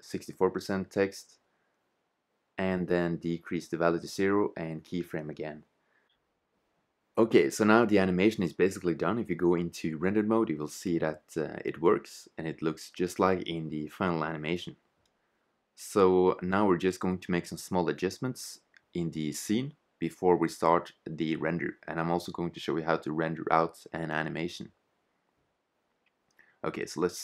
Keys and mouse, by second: 1.3 shift+z, 2.2-3.3 drag, 4.4 i, 6.5 shift+z, 7.8-8.8 drag, 9.3 shift+z, 12.9 click, 19.1 click, 24.2 shift+z.